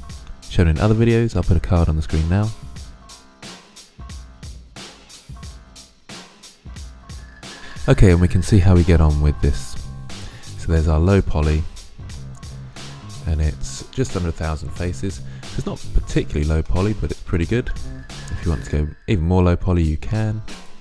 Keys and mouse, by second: 0.0 g, 1.1 g, 3.6 middle click, 4.1 right click, 4.3 g, 4.8 click, 5.4 ctrl+z, 6.2-6.8 drag, 6.9-10.1 middle drag, 10.9-12.0 middle drag, 13.8 middle drag, 15.8-19.2 middle drag, 20.4-20.8 drag.